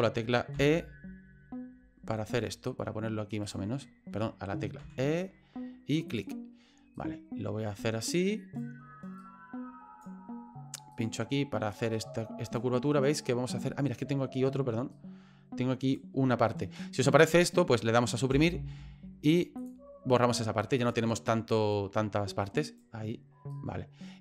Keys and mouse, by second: 0.5 e, 3.4 e, 4.8 e, 6.9-8.6 right drag, 9.2 right click, 10.9 right click, 11.7 right click, 14.9-15.9 right drag, 18.3 Delete, 20.8 right click, 21.7-22.8 right drag, 23.5-24.2 right drag.